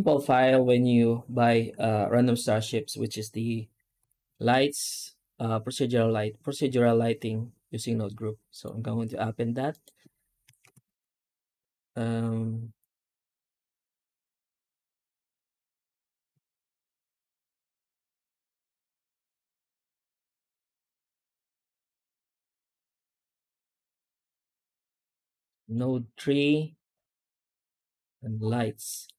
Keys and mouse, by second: 3.8 F4, 11.7 click, 28.8 middle click.